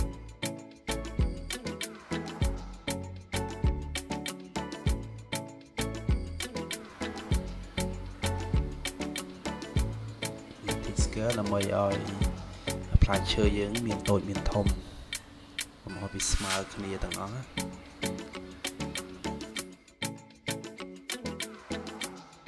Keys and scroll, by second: 16.8 -.